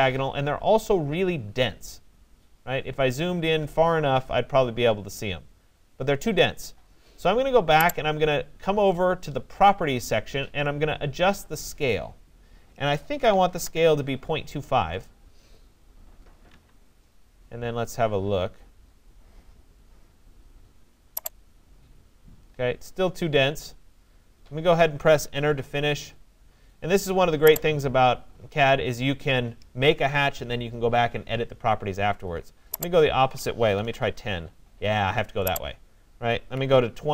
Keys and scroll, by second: 12.9-14.2 typing, 16.5 Tab, 25.0 Return, 33.4 0, 34.2 Tab, 36.3-37.1 typing.